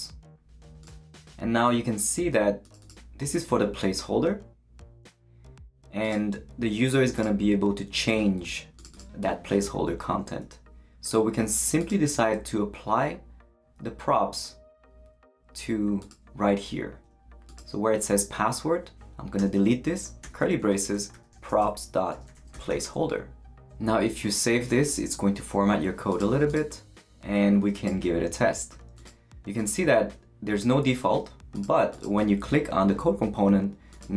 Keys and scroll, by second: 0.0-0.3 typing, 19.4-23.2 typing, 24.7 super+s.